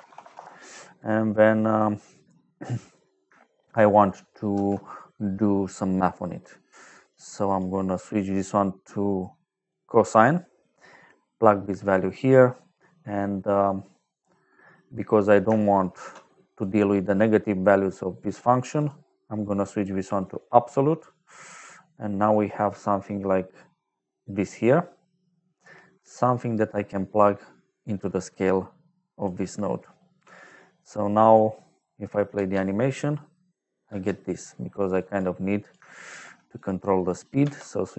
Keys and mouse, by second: 0.0 m, 0.2 Return, 1.6 click, 2.8 click, 4.4 shift+a, 6.9 click, 7.4 click, 8.0 click, 9.6 click, 12.8 middle click, 14.1 middle click, 15.0 click, 15.9 shift+d, 16.4 click, 17.0 click, 18.7 click, 20.1 click, 21.3 click, 22.2 middle click, 24.3 middle click, 27.4 click, 30.3 middle click, 32.3 space, 33.8 space, 34.9 click, 35.5 click, 36.0 shift+d, 36.5 click, 36.9 click, 37.3 d.